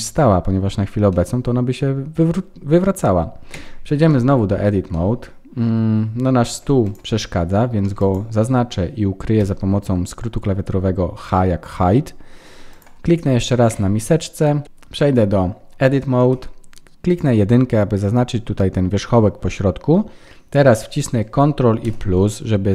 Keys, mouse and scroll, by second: 1.1 middle click, 4.0 shift+middle click, 4.5-4.9 scroll up 3, 4.9 middle click, 6.0-6.5 scroll down 3, 6.5 Tab, 6.8 click, 7.2 middle click, 7.9 click, 9.4 h, 10.2-10.9 scroll up 3, 11.2 middle click, 12.4-12.7 scroll up 1, 12.7 click, 13.7 Tab, 14.6 Tab, 14.6 click, 15.0-15.3 scroll up 3, 16.3 1, 17.0 click, 17.8-18.6 scroll up 5, 19.2-20.7 scroll down 6, 21.8 ctrl+KP_Add.